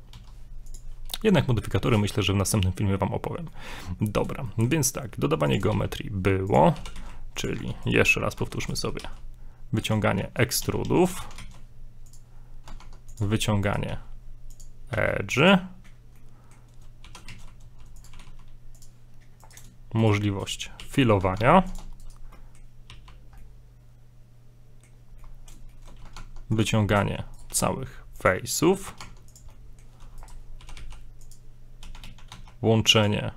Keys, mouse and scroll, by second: 0.1 s, 3.5 middle click, 4.0 shift+middle click, 4.5 middle click, 5.4 click, 5.7 shift+a, 6.7 g, 7.5 Tab, 7.9 right click, 8.6 right click, 9.0 right click, 9.0 e, 10.6 a, 10.8 a, 11.2 shift+d, 12.8 ctrl+Tab, 13.6 right click, 13.8 right click, 13.9 e, 14.9 e, 16.2 middle click, 17.0 g, 17.3 z, 18.1 g, 19.4 right click, 20.0 shift+right click, 20.8 f, 21.4 ctrl+Tab, 22.0 right click, 22.4 middle click, 23.6 middle click, 25.2 middle click, 25.2 scroll down 1, 25.7 shift+middle click, 26.2 ctrl+Tab, 26.8 middle click, 27.4 right click, 27.5 e, 28.5 shift+middle click, 29.0 ctrl+Tab, 29.5 middle click, 30.2 right click, 30.6 g, 31.8 a, 32.0 a, 32.3 q.